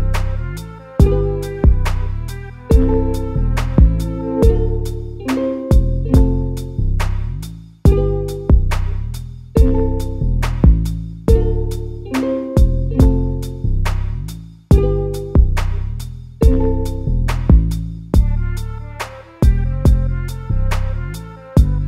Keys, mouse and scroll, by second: 0.5 g, 2.8 a, 3.0 a, 3.6 z, 4.0 click, 5.2 z, 6.5 g, 10.9 g, 11.8 a, 12.0 a, 12.4 click, 13.5 z, 13.8 click, 15.2 z, 16.1 g, 18.7 a, 18.9 a, 19.5-21.8 middle drag.